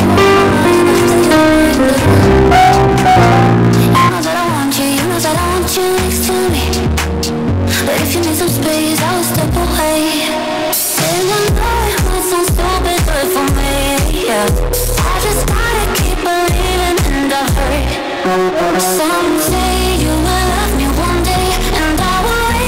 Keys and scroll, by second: 4.0 Page_Down.